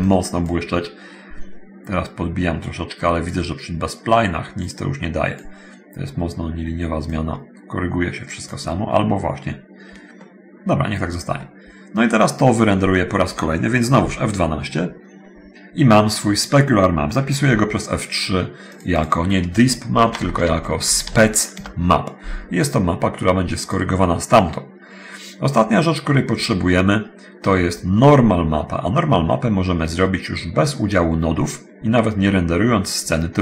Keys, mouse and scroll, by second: 0.2 click, 4.8 click, 7.3-8.8 drag, 10.4 middle click, 14.2 F12, 17.3 F3, 18.6 click, 20.2 shift+Home, 20.2 shift+s, 20.9 shift+p, 21.2 shift+e, 21.2 shift+c, 21.6 shift+Return, 23.8 click, 27.6 Escape, 28.6-28.9 scroll down 1, 29.1 scroll down 1, 31.0-31.4 scroll down 1, 31.6 middle click.